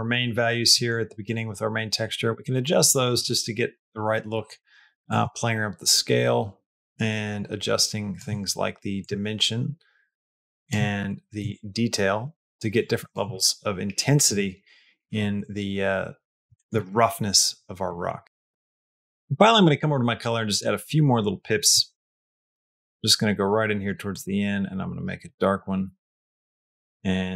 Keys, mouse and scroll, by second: 0.6 middle click, 2.7 middle click, 4.9-8.0 shift+drag, 8.9-10.6 shift+drag, 11.4-13.0 shift+drag, 15.1-15.8 scroll up 1, 15.8 middle click, 16.4 shift+middle click, 17.7 middle click, 18.1 shift+middle click, 20.3 click, 22.0-23.8 drag, 24.1 click.